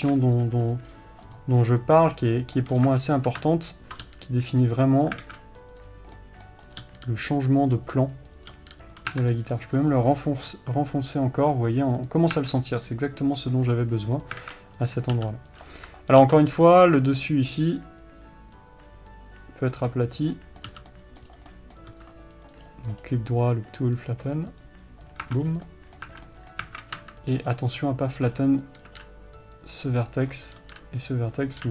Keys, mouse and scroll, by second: 0.0 alt+a, 1.3-1.7 scroll up 2, 1.7 click, 2.0-4.1 middle drag, 3.1 scroll up 1, 4.1 ctrl+click, 4.4 g, 5.6 alt+a, 6.2 click, 6.6 middle click, 7.1 click, 7.2 g, 8.1 click, 8.1 g, 8.5 click, 8.9 g, 9.5 Tab, 9.6-9.9 scroll down 1, 9.9-16.1 middle drag, 12.7 Tab, 14.8 alt+a, 15.9 c, 16.1 3, 17.4 c, 20.7 middle click, 21.0 c, 21.7 right click, 21.9-23.0 middle drag, 22.9 c, 23.0 right click, 25.0-26.0 right drag, 25.6 Tab, 25.8 scroll down 1, 26.0-27.9 middle drag, 26.4 Tab, 27.1 alt+a, 27.4 1, 27.9 click, 28.1-29.9 middle drag, 28.6-29.0 scroll up 1, 29.0 g, 29.9 click, 30.9 g.